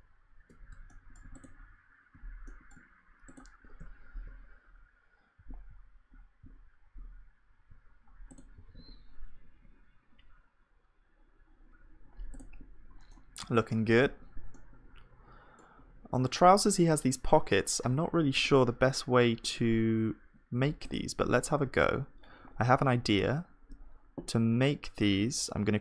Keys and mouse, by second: 0.6 middle click, 3.8 z, 5.4 z, 6.4 z, 8.6 ctrl+s, 13.1-14.1 drag, 14.1 KP_1, 14.9-18.1 middle drag, 21.7 shift+a.